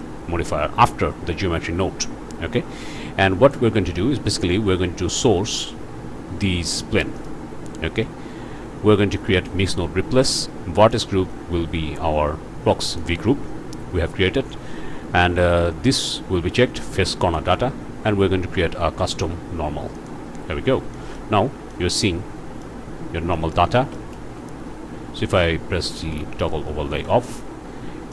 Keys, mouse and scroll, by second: 5.1 click, 7.2 click, 10.8 click, 12.9 click, 15.9 click, 17.2 click, 19.9 click, 20.9 click, 21.4 alt+a, 21.7-22.8 alt+drag, 23.3 shift+click, 24.0 ctrl+shift+click, 24.2 ctrl+shift+space, 25.3 z, 26.5 scroll down 2, 26.9 shift+middle click, 27.1 shift+click, 27.5 shift+middle click.